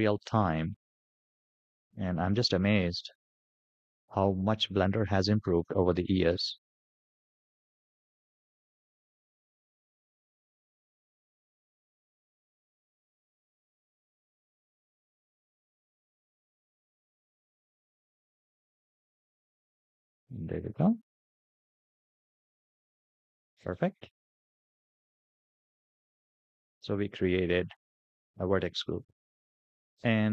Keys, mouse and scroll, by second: 4.5 click, 6.5-7.9 drag, 9.1-13.8 drag, 16.2 click, 17.5-19.8 drag, 20.3-21.4 middle drag, 25.0-26.2 drag, 27.1 scroll up 2, 27.8-28.3 middle drag, 28.9 scroll down 1, 29.4 shift+middle click.